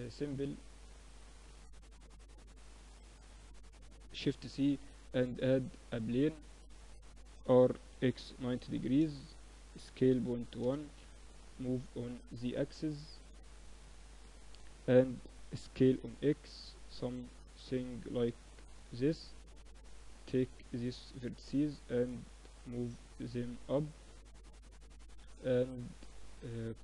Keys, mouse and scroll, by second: 1.0 KP_1, 3.2 shift+c, 3.8 shift+a, 6.9 r, 8.9 s, 10.9-13.6 drag, 14.7 s, 18.2 middle click, 18.6 Tab, 19.1-22.5 drag, 20.6 right click, 26.7 ctrl+r.